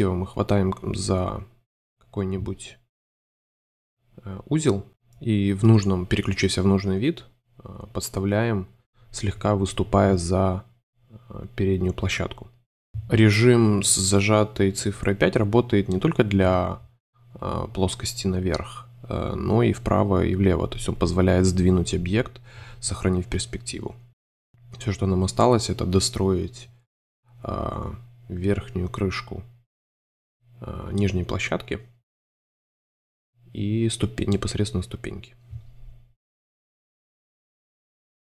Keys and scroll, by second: 0.0 super+space, 2.8 5, 5.3 super+c, 5.5 super+f, 6.2 5, 7.9 space, 8.9 v, 10.3 super+f, 11.0-12.8 typing, 15.7 space, 17.8 v, 19.0 BackSpace, 19.8 space, 21.1 c, 22.7 shift+2, 23.2 2, 24.3 2, 27.1 shift+v, 30.6 v, 31.9 super+c, 32.0 super+3, 32.8 space, 34.7-35.7 typing, 36.5 super+z, 37.0 super+3.